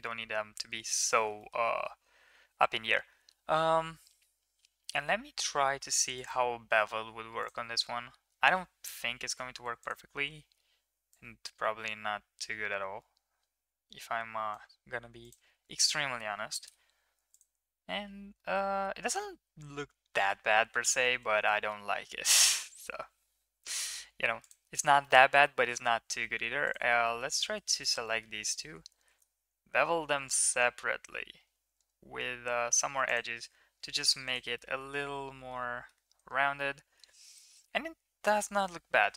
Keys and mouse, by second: 0.6 ctrl+s, 1.2 shift+middle click, 1.4 middle click, 6.2-7.4 drag, 9.4 ctrl+a, 11.2-14.5 drag, 15.2-16.6 drag, 18.3-20.3 middle drag, 20.8 middle click, 21.1 Tab, 21.6 shift+middle click, 22.5 alt+click, 23.3 2, 23.6 click, 24.4 click, 25.0 middle click, 25.4 shift+click, 25.4 shift+middle click, 27.0 middle drag, 27.6 shift+middle click, 28.1 middle click, 29.1 ctrl+b, 33.3 Tab, 34.6-35.9 middle drag, 36.1 ctrl+s, 36.6-37.0 middle drag, 37.3 middle click, 38.6-39.1 middle drag.